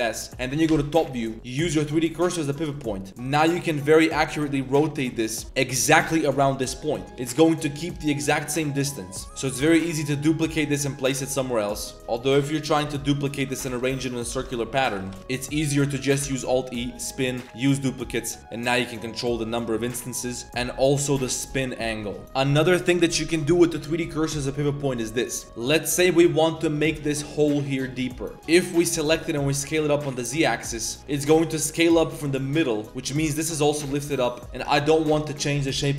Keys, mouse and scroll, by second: 0.7 KP_7, 1.4-2.2 drag, 2.6 click, 3.1 r, 5.9 shift+click, 8.0 r, 9.2 Tab, 9.2 a, 9.2 z, 9.6 shift+d, 9.8 r, 11.9 x, 11.9 a, 11.9 shift+d, 12.0 r, 13.3-15.6 typing, 16.2 alt+e, 17.6 click, 18.5-20.0 drag, 20.4-22.2 drag, 24.8 click, 25.3 click, 25.4 Tab, 25.4-26.8 typing, 25.7 shift+drag, 26.1 click, 27.1 click, 27.9-28.4 drag, 28.3 a, 28.3 b, 28.6 click, 28.9 s, 31.1 s, 33.0 z, 33.1 click, 33.9 click, 34.3 click, 34.7 ctrl+z.